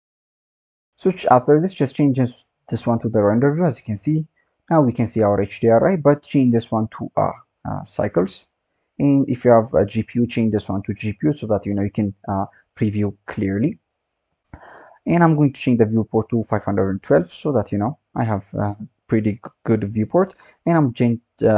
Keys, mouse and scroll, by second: 0.2 click, 0.8-2.1 scroll down 4, 2.1 click, 3.3-4.8 scroll down 3, 4.8 click, 6.6 click, 7.2-12.2 drag, 15.5-18.6 drag, 20.5 click.